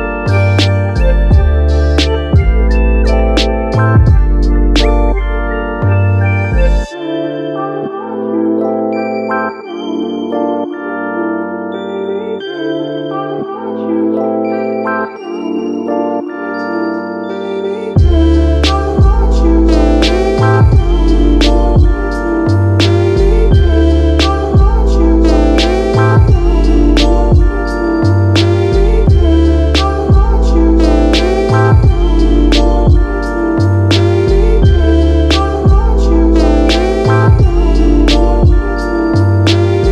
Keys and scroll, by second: 1.9 super+z, 2.1 space, 3.3 m, 8.4 super+z, 16.9 space, 27.0 super+z, 32.3 super+z.